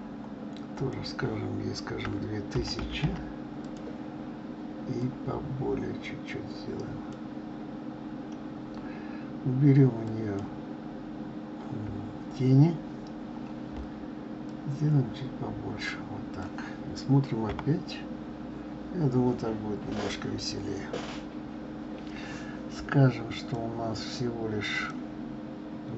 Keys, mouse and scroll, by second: 0.9-2.9 drag, 2.9 0, 5.1-8.1 drag, 10.1 click, 14.6-17.6 drag, 17.6 KP_0, 23.5 click, 24.9-25.9 drag.